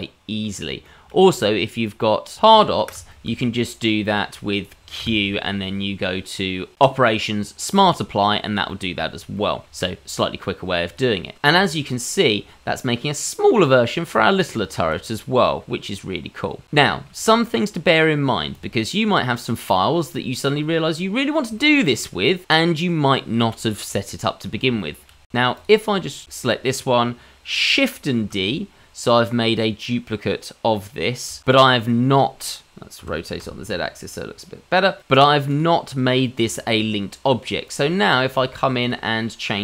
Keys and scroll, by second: 2.5 ctrl+z, 5.0 q, 27.9 shift+d, 33.5 r.